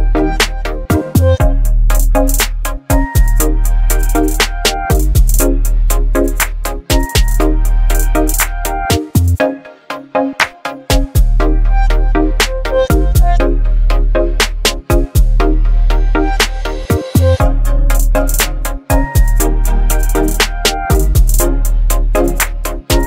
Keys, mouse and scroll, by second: 0.5-1.1 drag, 2.5 alt+right click, 2.5-3.1 alt+right click, 3.7-5.8 drag, 10.5 space, 10.6-11.2 click, 11.0 space, 12.0-12.6 alt+right drag, 13.6-15.7 drag, 16.0 space, 16.1-16.8 click, 16.5 space, 18.1-19.3 click, 19.9 alt+scroll down 1, 20.3 space, 20.7-21.6 click, 20.8 space, 20.9 click, 21.6 click, 22.6 v.